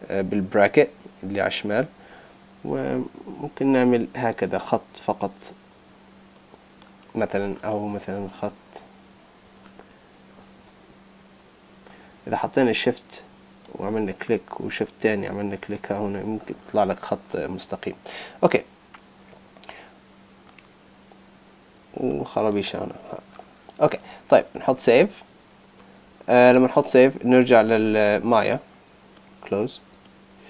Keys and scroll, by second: 7.4 super+z, 24.6 super+s, 26.7 super+Tab.